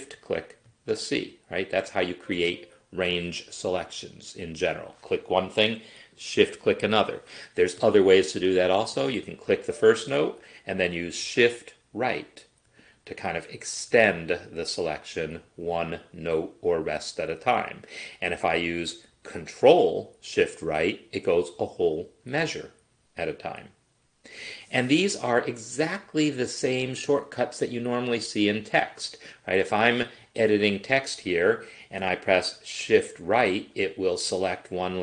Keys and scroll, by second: 11.4 shift+Right, 12.8 shift+Right, 14.0 shift+Right, 15.6 shift+Right, 20.7 ctrl+shift+Right, 22.2 ctrl+shift+Right, 23.3 ctrl+shift+Right, 24.4 ctrl+shift+Right, 29.5 Left, 33.1 shift+Right, 33.8 shift+Right, 34.4 shift+Right.